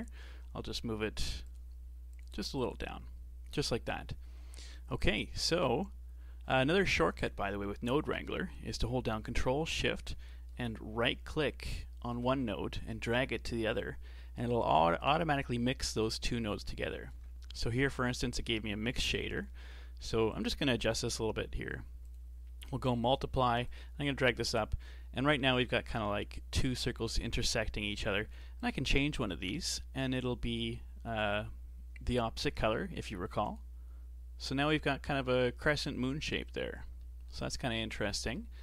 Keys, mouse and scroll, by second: 4.6-4.9 scroll down 2, 4.9-7.2 middle drag, 7.2 click, 10.5-18.1 ctrl+shift+right drag, 18.1-19.1 shift+middle drag, 19.1 click, 19.5 scroll up 4, 20.3-23.3 drag, 23.7-26.7 drag, 28.6-31.6 drag, 36.3-37.0 scroll down 3, 37.0-38.6 shift+middle drag.